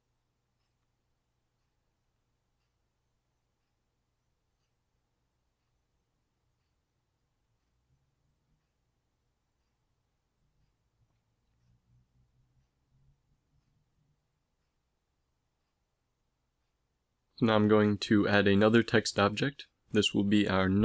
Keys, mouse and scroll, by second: 0.0 Right, 0.4 Right, 0.8 Right, 1.2 Right, 1.4 Right, 1.5 Right, 1.8 Right, 2.1 Right, 2.5 Right, 2.7 Right, 2.9 Right, 3.6 z, 4.0 z, 5.5 ctrl+s, 12.8 middle click, 15.1 middle click, 17.2 shift+a.